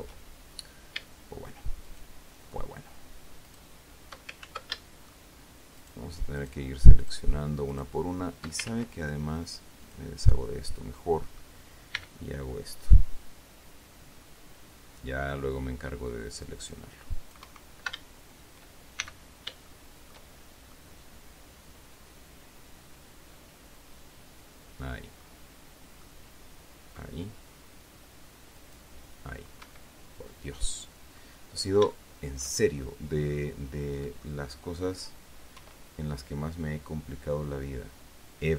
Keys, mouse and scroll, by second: 2.2 shift+right click, 3.8 shift+right click, 4.8 ctrl+shift+z, 5.1 ctrl+shift+middle click, 6.1 shift+right click, 6.7 shift+right click, 7.3 shift+right click, 8.0 shift+right click, 9.0 ctrl+shift+z, 10.2 click, 10.9-11.2 scroll down 2, 11.3 click, 12.3 c, 13.2-17.9 drag, 17.8 Escape, 19.3 shift+c, 20.0 shift+click, 21.1-25.8 drag, 26.3-27.5 drag, 28.9 click, 30.0 Escape, 30.6-31.7 drag, 31.8 scroll down 2, 32.3 shift+middle click, 33.3-34.7 middle drag, 35.9 e.